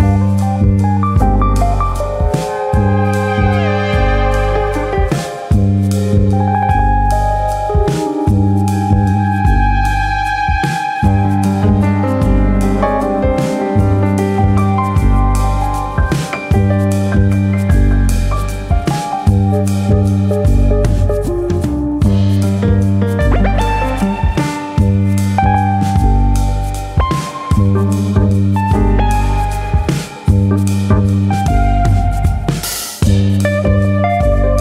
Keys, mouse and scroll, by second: 0.0 click, 0.7 alt+click, 1.1 s, 1.5 click, 2.4 click, 3.1 alt+click, 3.2 alt+click, 4.5 alt+click, 4.7 alt+click, 4.7 middle click, 5.1 shift+middle click, 6.1 g, 7.3 click, 7.8 click, 8.8 g, 9.7 click, 9.9 middle click, 10.6 middle click, 11.2 alt+click, 11.9 click, 12.4 s, 13.5 click, 13.6 middle click, 14.4 alt+click, 15.4 g, 16.4 click, 16.6 middle click, 16.9-17.7 scroll up 2, 17.1 shift+middle click, 17.8 click, 18.6 shift+click, 19.5 click, 26.6 click.